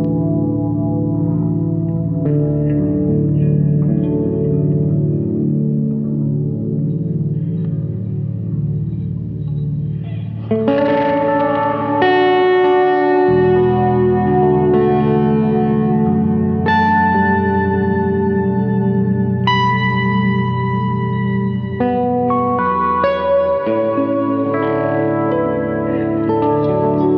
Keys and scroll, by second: 18.4 Delete.